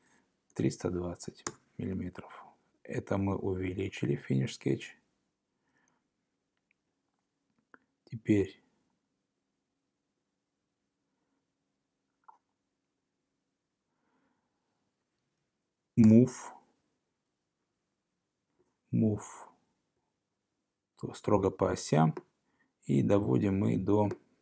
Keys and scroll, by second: 1.1-1.8 typing, 16.1 m.